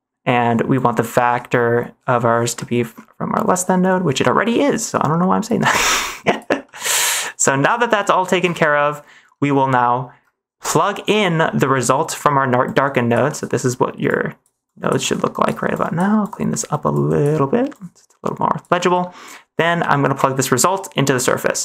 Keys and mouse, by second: 0.7 click, 2.6 middle click, 4.6 middle click, 5.4 click, 6.2 click, 6.6 middle click, 7.2 click, 7.8 middle click, 8.5 ctrl+s, 8.8 middle click, 11.3 middle click, 12.6 click, 13.3 middle click, 14.0 click, 14.2 click, 14.6 click, 15.1 click, 15.8 click, 16.2 click, 16.8 click, 17.6 click, 18.8 middle click, 20.1-21.2 drag.